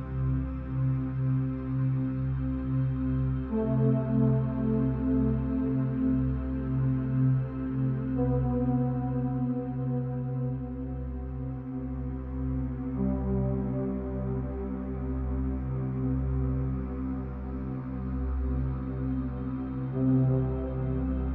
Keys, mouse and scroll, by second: 2.0 g, 5.5-8.6 drag, 8.6 0, 9.8 g, 11.1 g, 12.5 click, 14.9 shift+d, 16.2 g, 17.5 g.